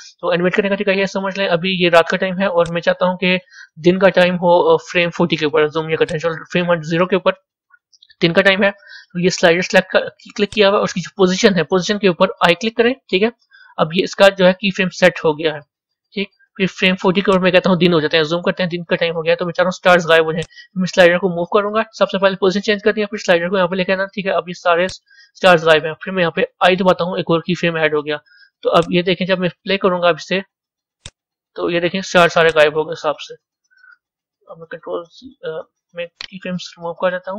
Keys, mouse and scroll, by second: 6.4-13.3 drag, 17.3-26.6 drag, 28.7-32.6 drag, 35.0 ctrl+z.